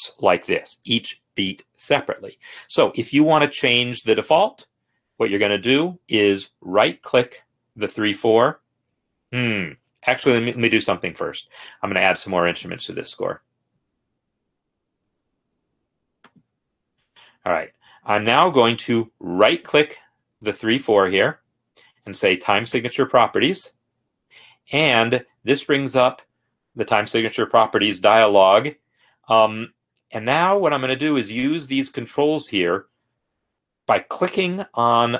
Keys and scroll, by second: 10.4 i.